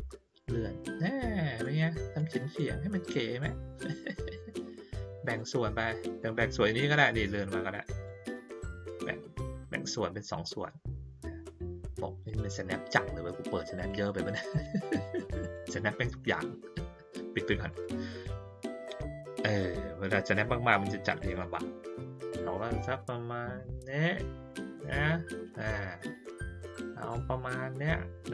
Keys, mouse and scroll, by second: 0.3-1.6 drag, 2.1-4.5 drag, 5.2 click, 6.2-8.0 drag, 8.9-12.2 drag, 13.7 click, 14.5 click, 15.4 click, 17.7 click, 18.2-25.6 drag.